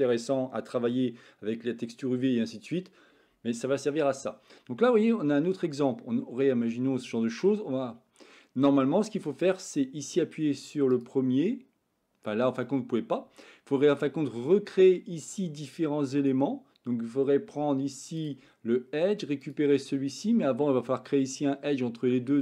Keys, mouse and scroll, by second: 5.5-7.5 middle drag, 12.6-14.1 middle drag, 18.0 click.